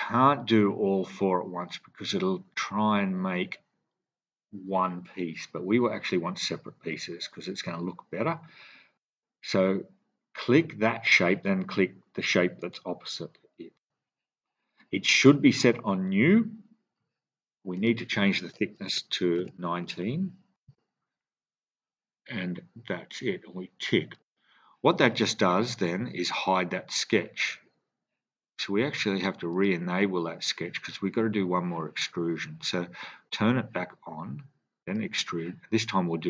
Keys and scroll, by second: 18.8-19.3 typing, 20.5 Return.